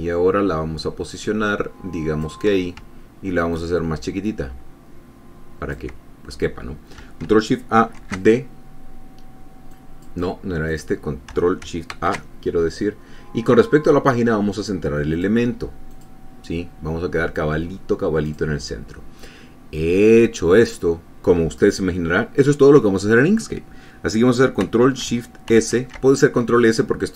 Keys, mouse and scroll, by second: 3.8-6.2 ctrl+drag, 8.1 ctrl+shift+d, 10.0 click, 11.0 click, 12.2 ctrl+shift+a, 15.4 click, 16.2 click, 18.6 click, 25.8 ctrl+shift+s.